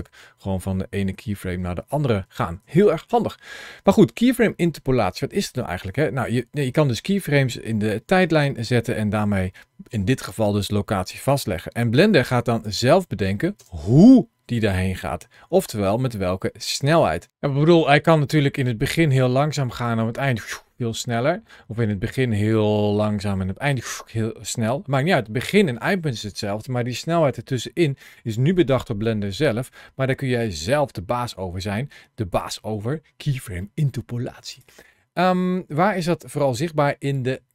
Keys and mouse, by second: 0.0 Right, 0.4 Right, 0.5 Right, 0.7 Right, 0.9 Left, 1.2 Left, 1.5 Left, 1.7 Left, 1.9 Right, 2.1 Right, 2.4 Left, 2.6 Left, 2.9 Up, 5.2-12.5 drag, 12.6 space, 13.4 space, 14.6-17.2 drag, 18.4-34.3 drag.